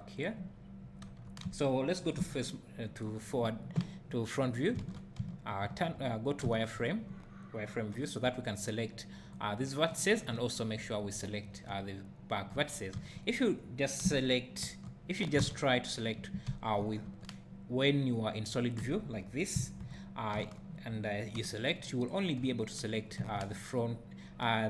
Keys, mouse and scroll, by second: 0.6-1.1 scroll down 2, 1.1 Tab, 1.9 click, 2.2 KP_1, 4.8 alt+a, 5.2 z, 8.3 b, 10.7 `, 12.5 Tab, 12.9 z, 14.0 KP_1, 14.6 Tab, 15.4 alt+a, 17.1 Tab, 19.8 KP_1, 20.3 Tab, 21.4 b.